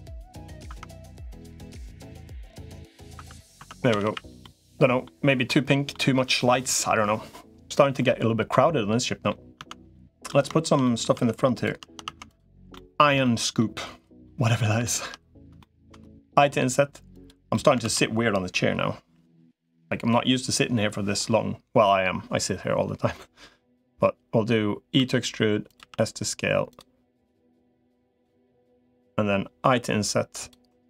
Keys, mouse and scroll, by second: 0.2 click, 0.6 Tab, 1.6-2.8 middle drag, 3.0 Tab, 3.4 Tab, 3.8 a, 4.0 a, 4.2 middle click, 5.3 middle click, 8.3 middle click, 9.4 Tab, 9.7 middle click, 10.3 shift+middle click, 10.6 middle click, 11.0 Tab, 12.0 Tab, 12.5 shift+middle click, 13.0 middle click, 14.0 middle click, 14.6 shift+middle click, 15.4 shift+middle click, 16.2 i, 17.3 middle click, 17.6 ctrl+z, 24.8 e, 25.6 s, 27.4 click, 28.4 s, 29.4 i, 30.6 right click.